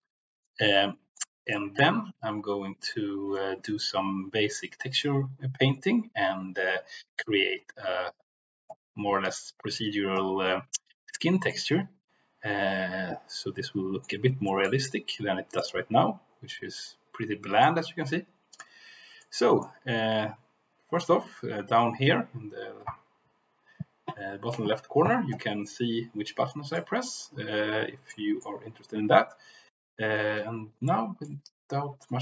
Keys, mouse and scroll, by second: 0.4 middle click, 1.4 shift+middle click, 11.5-14.0 middle drag, 14.4 shift+middle click, 15.5 click, 16.5-17.7 middle drag, 18.5 click, 19.2 middle click, 26.7 middle click, 28.0 middle click, 30.8 shift+middle click.